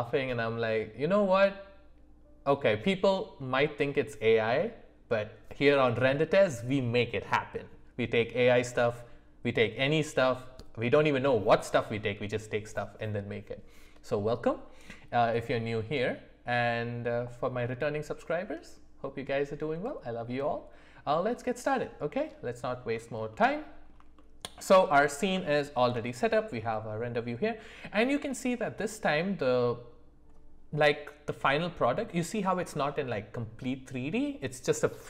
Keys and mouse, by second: 23.3 middle click, 24.1 shift+middle click, 24.9 middle click, 25.5-25.8 shift+middle drag.